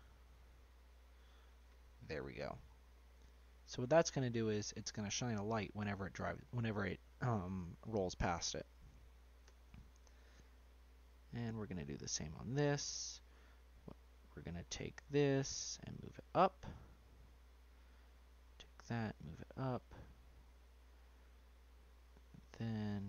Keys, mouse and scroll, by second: 1.2 click, 1.9 middle click, 2.3-2.9 scroll down 4, 2.9 middle click, 3.7 scroll down 1, 3.7-6.0 middle drag, 9.4 Tab, 10.0 middle click, 10.6 Tab, 11.1 Tab, 11.4 click, 12.0 Tab, 12.9 shift+middle click, 13.3 shift+middle click, 14.4 middle click, 15.0 click, 17.0 click, 17.7 click, 18.6-19.6 drag, 20.3 click, 21.4 shift+middle click, 21.8 scroll up 1, 21.9 middle click, 22.5-23.0 scroll up 1.